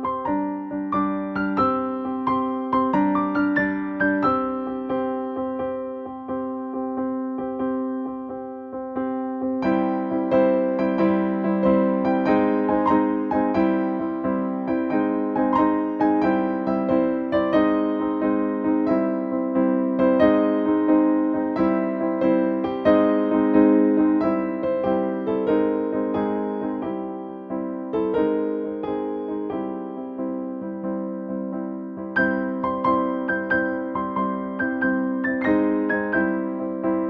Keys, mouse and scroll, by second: 4.5 click, 9.4 click, 12.6 shift+Down, 14.5 click, 16.5 click, 17.2 Down, 18.4 click, 22.2 click, 24.4 right click, 25.7 click, 25.9 ctrl+space, 26.8-29.2 ctrl+drag, 29.2 ctrl+space, 29.4 ctrl+click, 29.5 ctrl+space, 29.8 click, 30.0 space, 31.3-35.3 shift+drag.